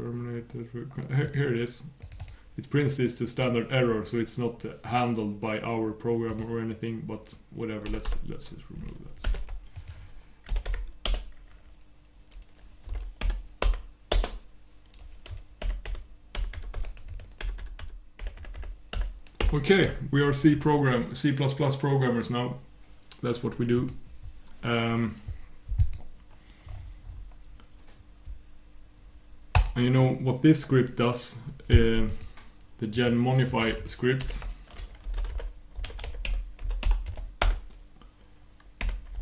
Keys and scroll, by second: 15.6 super+\.